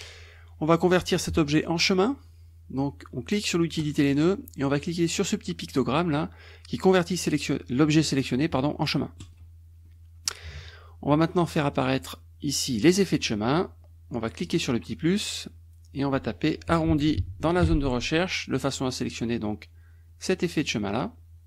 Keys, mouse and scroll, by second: 3.8 click, 9.2 click, 9.9-11.8 middle drag, 11.8 click, 12.9 click, 14.4 click, 15.9 click, 16.7-18.1 typing, 20.7 click.